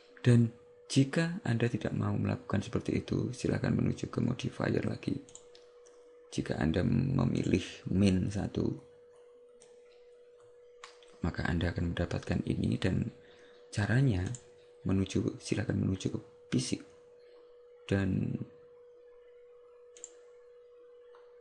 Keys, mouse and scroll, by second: 5.4 click, 7.5 click, 14.4 click, 20.1 click, 20.8-21.4 scroll down 3.